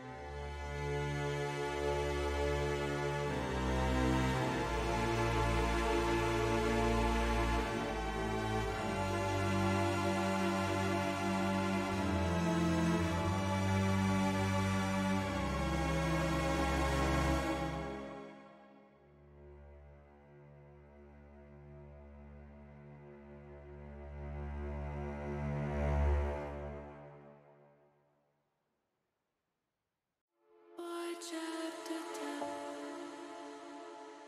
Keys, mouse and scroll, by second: 0.2 middle click, 0.7 middle click, 1.2 shift+middle click, 2.4 middle click, 3.2 shift+middle click, 5.6 shift+middle click, 6.7 shift+click, 8.0 middle click, 8.9 middle click, 9.6 shift+click, 10.6 ctrl+z, 11.1 shift+middle click, 12.2 shift+click, 13.6 middle click, 14.5 shift+click, 15.7 ctrl+z, 16.0 middle click, 17.4 shift+click, 18.0 middle click, 18.6 shift+middle click, 19.5 shift+middle click, 20.8 shift+click, 22.1 h, 23.6 ctrl+z, 24.4 middle click, 25.3 click, 25.9 click, 27.0 shift+click, 28.1 h, 29.5 middle click, 30.5-31.6 middle drag, 31.8 middle click, 32.5 middle click, 33.2 shift+middle click.